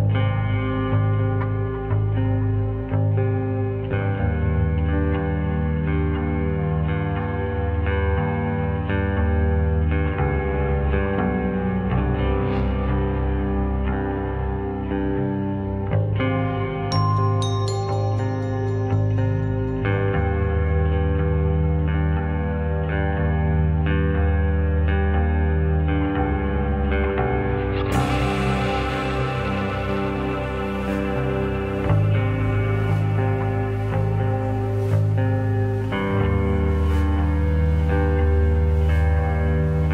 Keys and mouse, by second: 0.3 shift+click, 1.2 shift+click, 1.5 middle click, 3.1 shift+click, 3.4 middle click, 4.1-5.3 shift+drag, 5.4-5.8 middle drag, 6.9 shift+click, 8.4-8.9 middle drag, 10.2-10.7 middle drag, 11.2-11.5 drag, 11.2-11.5 right drag, 14.3 ctrl+r, 15.9 s, 18.0 middle click, 18.6 click, 20.1 Tab, 20.9 middle click, 21.5 shift+click, 21.7 middle click, 22.6-23.0 middle drag, 23.3 shift+middle click, 23.6 middle click, 25.3 middle click, 27.1 middle drag, 27.7 middle click, 27.9 middle click, 28.4-29.2 middle drag, 29.7 Tab, 30.1 click, 31.1-31.4 drag, 31.7-33.3 drag, 34.5-35.9 drag, 36.5-37.6 middle drag.